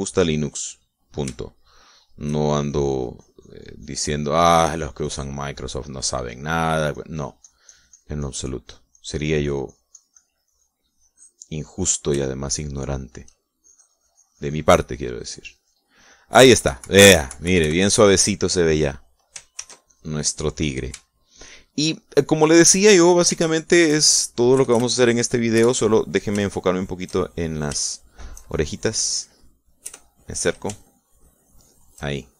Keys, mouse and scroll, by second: 1.1 click, 1.8-2.9 middle drag, 2.9 shift+middle click, 3.7-6.5 shift+drag, 6.7 shift+middle click, 7.4-9.7 drag, 10.0-13.1 drag, 13.3 shift+click, 13.9 shift+click, 14.7-16.9 shift+drag, 17.4 KP_Subtract, 18.9 middle click, 20.4 ctrl+click, 20.6 ctrl+s, 20.9 ctrl+click, 22.5-24.3 shift+drag, 25.6 KP_Add, 26.6 KP_Subtract, 27.5-29.4 shift+middle drag, 29.8 shift+middle click, 30.9 KP_Add, 31.9-32.3 shift+drag.